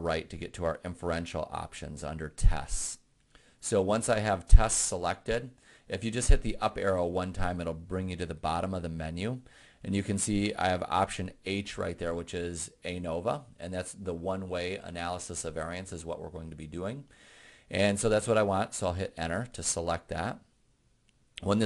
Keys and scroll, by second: 0.8 Right, 8.6 Up, 19.5 Return.